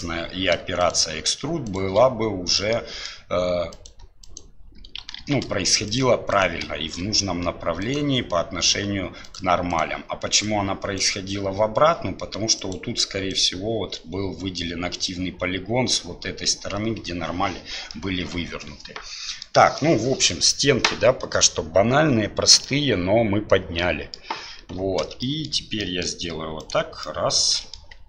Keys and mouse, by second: 2.7 shift+click, 3.7-4.7 shift+drag, 5.2 ctrl+z, 6.7 middle click, 7.8 shift+middle click, 9.7-11.3 shift+middle drag, 17.9-19.4 middle drag, 19.8 middle click, 22.7-24.1 drag, 25.2 shift+click, 25.8 middle click, 27.0 middle click.